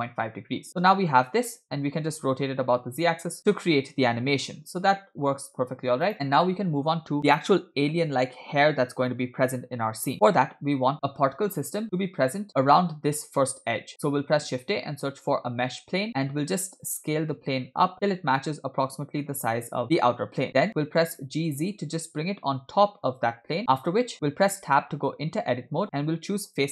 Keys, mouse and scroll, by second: 2.1 r, 14.3 shift+a, 18.0 s, 21.2 g, 25.0 Tab, 26.6 click.